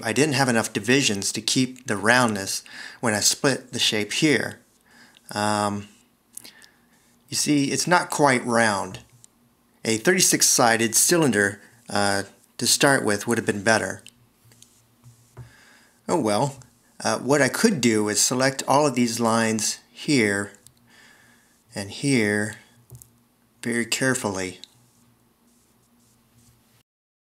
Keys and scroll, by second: 9.0 v, 16.1 s.